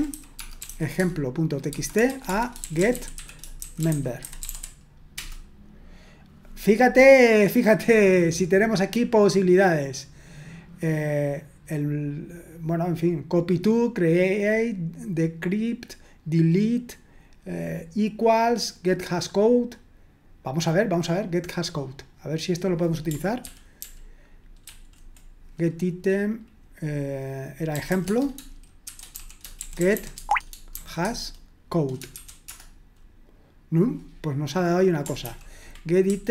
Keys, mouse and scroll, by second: 0.0-5.1 typing, 7.9-9.3 scroll up 1, 10.1-11.0 scroll down 1, 17.0-18.0 scroll down 1, 21.8-23.4 drag, 23.4 ctrl+p, 23.8 ctrl+p, 24.7 ctrl+w, 27.6-30.8 typing, 32.2 typing, 35.2 ctrl+p, 36.1 ctrl+w.